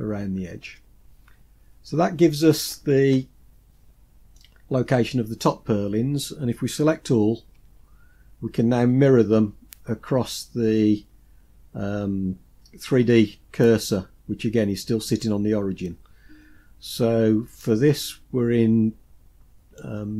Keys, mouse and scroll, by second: 4.5-6.5 scroll down 2, 7.5 a, 8.2-10.6 scroll down 2, 10.6-11.4 scroll down 1, 19.7-20.1 drag.